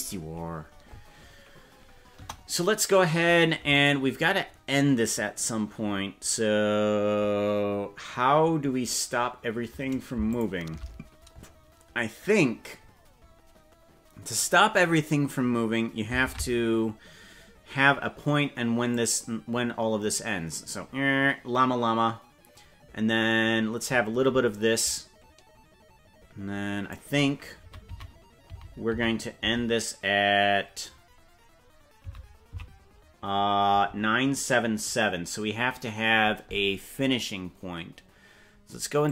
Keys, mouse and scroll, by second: 2.1 KP_0, 3.9 right click, 10.2 shift+click, 14.2 click, 15.1-15.4 scroll down 4, 16.2 ctrl+Tab, 18.9-23.2 drag, 23.4-26.8 drag, 27.6 Right, 28.0 Right, 28.6 Right, 29.0 Right, 29.4 Right, 30.8-31.2 scroll down 5, 32.2 Right, 32.6 Left.